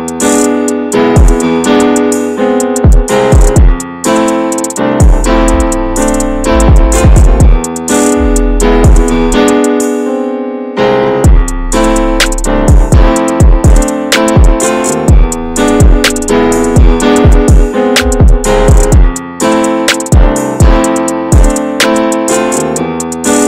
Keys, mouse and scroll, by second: 0.5 p, 0.9 Tab, 1.1 click, 2.9 /, 3.4 middle click, 3.5-4.1 scroll up 2, 3.8 shift+middle drag, 4.1 Tab, 4.5 middle click, 5.0 shift+middle click, 5.1-6.2 scroll up 4, 6.2 ctrl+r, 8.2 middle click, 8.4-8.7 scroll up 2, 8.7 shift+middle click, 9.2 ctrl+r, 11.3 middle click, 12.1-12.4 scroll down 1, 12.4 shift+middle click, 12.7 scroll up 2, 12.9 shift+middle click, 13.5 ctrl+r, 15.6 ctrl+r, 18.1-19.5 middle drag, 19.5 ctrl+r, 21.8 ctrl+r.